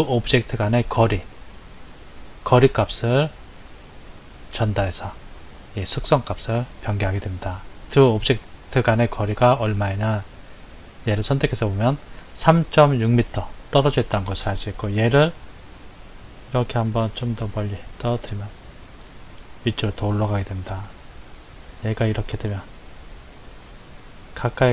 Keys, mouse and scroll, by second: 14.7 click, 17.1 click, 20.9 click.